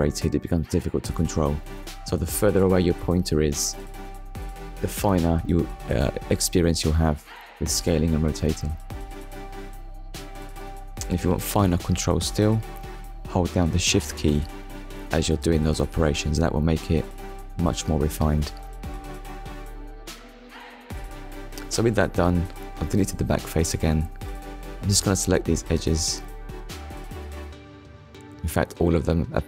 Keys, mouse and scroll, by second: 1.6 middle click, 2.5-2.9 scroll down 2, 2.9 shift+middle click, 3.4 middle click, 8.8 click, 10.9 click, 12.2 shift+h, 12.6 e, 13.1 d, 13.4 shift+s, 14.8 Return, 15.9 middle click, 16.8-17.2 scroll down 1, 17.5 click, 18.2 middle click, 19.5 Delete, 21.3 click, 22.6 click, 23.2 middle click, 28.5 middle click.